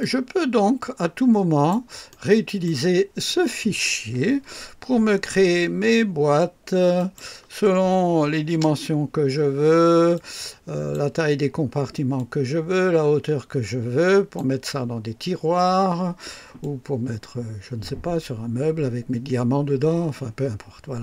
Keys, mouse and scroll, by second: 2.1-2.8 right drag, 6.9 click, 8.2 KP_5, 8.6 Return, 10.1-11.1 drag, 12.1-14.5 drag, 16.6-21.0 drag.